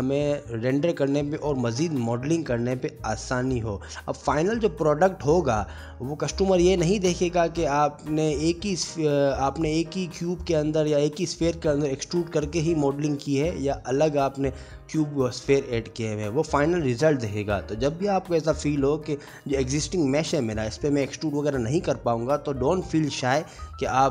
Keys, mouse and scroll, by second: 0.0 /, 0.1 middle click, 0.2 scroll up 2, 0.3 Tab, 0.4 shift+middle click, 0.4 click, 0.4 3, 0.5 shift+click, 0.6 g, 1.0 /, 1.1 scroll down 1, 1.1 middle click, 1.4 middle click, 2.4 2, 2.5 click, 2.6 g, 2.9 middle click, 3.4 middle click, 3.7 click, 3.7-7.5 typing, 4.0 middle click, 4.8 click, 5.1 middle click, 5.5 click, 6.0 middle click, 6.2 Tab, 6.6 middle click, 6.6 scroll up 3, 6.7 middle click, 7.0 right click, 9.0 click, 9.4 middle click, 10.1 middle click, 10.9 Tab, 11.1 click, 11.1 2, 11.2 ctrl+x, 11.4 middle click, 11.6 scroll up 1, 11.8 click, 11.8 3, 12.1 ctrl+z, 12.2 ctrl+z, 12.4 ctrl+z, 12.4 g, 13.2 shift+click, 13.4 m, 14.0 ctrl+z, 16.8 middle click, 17.0 Tab, 17.3 click, 17.5 middle click, 18.0 click, 18.3 Tab, 18.3 1, 18.5 shift+click, 18.7 shift+click, 18.9 shift+click, 18.9 middle click, 18.9 g, 19.6 middle click, 20.2 middle click, 20.2 click, 20.5 shift+click, 20.6 g, 21.1 shift+click, 21.3 shift+click, 21.7 scroll up 1, 21.7 g, 21.8 middle click, 22.4 Tab, 22.4 click, 22.7 s, 23.1 middle click, 23.8 middle click, 23.8 g.